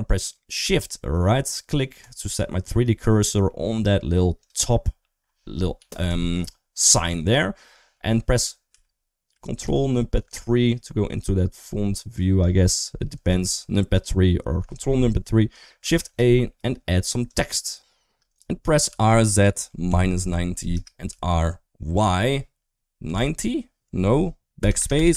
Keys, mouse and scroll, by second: 3.3 middle click, 4.2 click, 5.6 KP_1, 5.9 KP_3, 6.7 middle click, 8.5 KP_3, 9.5 ctrl+KP_3, 11.4 middle click, 13.2 ctrl+KP_3, 15.5 shift+middle click, 15.9 shift+a, 18.2 right click, 18.7 r, 20.9 r.